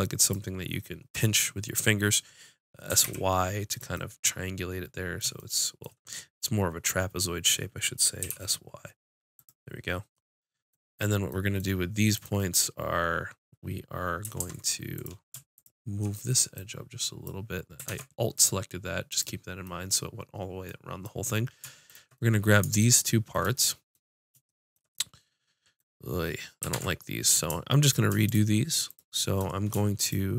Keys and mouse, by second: 2.9 s, 3.9 click, 4.0 middle click, 4.3 middle click, 4.9 middle click, 5.4 middle click, 8.2 s, 9.4-11.2 drag, 12.1-14.3 drag, 14.3 ctrl+Tab, 15.5-17.6 drag, 17.9 ctrl+Tab, 21.9 click, 26.7 ctrl+Tab, 27.8-30.3 drag.